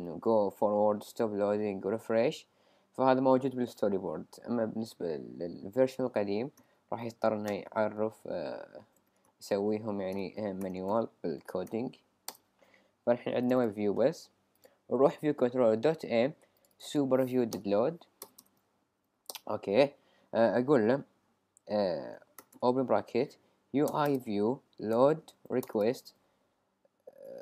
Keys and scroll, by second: 7.0 f, 8.8 shift+w, 10.1 shift+v, 12.3 Return, 18.2 Return, 18.8 Up, 19.3 Return, 22.1-23.5 typing, 23.9 Return, 25.1 typing, 27.0-27.4 typing.